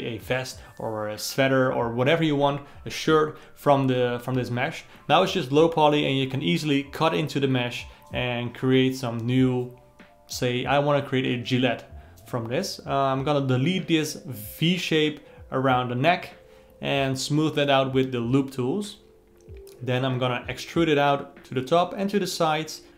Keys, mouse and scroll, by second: 0.7-2.0 ctrl+middle drag, 2.6-4.0 middle drag, 4.0 click, 4.3 alt+middle click, 10.7 alt+middle click, 11.7 c, 14.7 x, 15.5 alt+middle click, 15.9 click, 16.8 Tab, 17.4 2, 17.7 alt+click, 18.2-19.5 alt+middle drag, 19.5 e, 21.7 alt+middle click, 22.7 g.